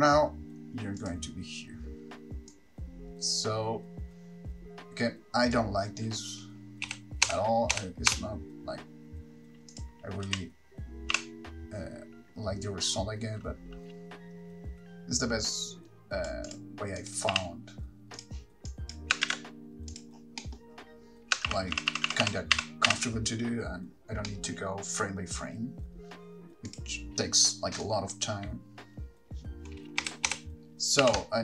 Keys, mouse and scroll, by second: 1.3 click, 2.7 click, 7.1 Right, 7.5 Right, 7.9 Right, 8.3 Right, 9.9 click, 17.2 click, 18.4 r, 18.9 click, 19.5 shift+d, 20.2 click, 20.4-21.0 scroll down 1, 21.7 middle click, 21.7-22.0 scroll down 9, 21.7 shift+r, 22.0-22.5 shift+r, 22.8 shift+r, 23.1 shift+r, 27.0 middle click, 27.0 click, 27.0-27.7 scroll up 5, 28.0 click, 30.2 Right, 30.5 Right, 31.3 r.